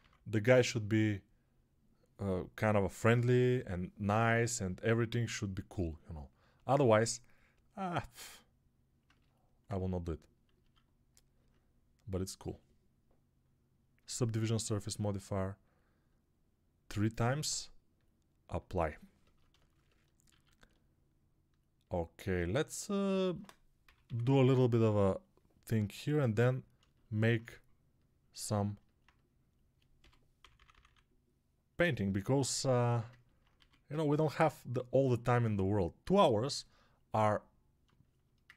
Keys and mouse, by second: 4.8 1, 10.5 alt+q, 20.3 alt+q, 24.1-24.7 typing, 29.8-30.7 typing, 33.4 1.